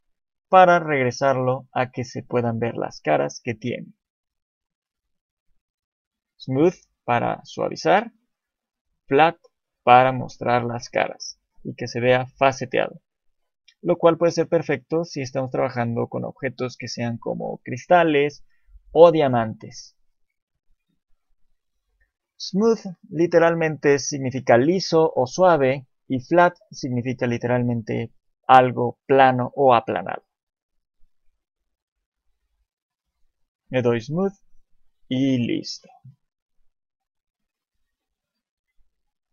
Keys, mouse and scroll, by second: 4.1 click, 7.6 click, 32.1-32.6 scroll down 1, 33.1 click, 34.7 scroll down 1, 35.4 scroll down 2, 36.1 scroll down 1.